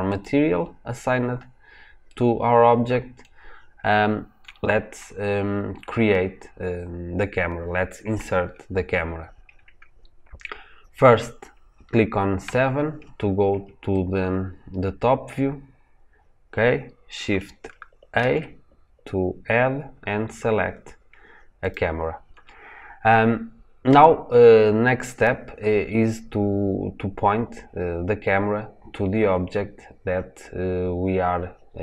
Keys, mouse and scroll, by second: 0.0 click, 0.8-1.2 scroll down 1, 1.2-2.0 scroll up 1, 2.0-3.5 middle drag, 3.5-3.9 scroll down 1, 3.9-4.5 scroll up 1, 4.5 scroll down 1, 12.3 KP_7, 13.8-15.5 shift+middle drag, 15.5-20.7 scroll up 1, 24.6-26.0 scroll up 1, 26.7-27.8 scroll down 1, 27.8-31.4 scroll up 1.